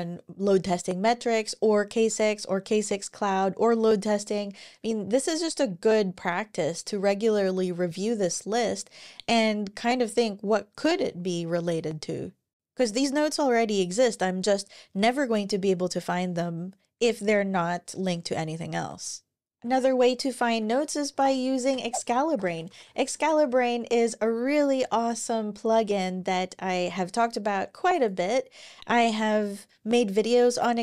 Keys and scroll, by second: 19.5 super+w, 20.3 super+o, 20.6-23.4 typing, 24.5 Return, 28.8 ctrl+super+r.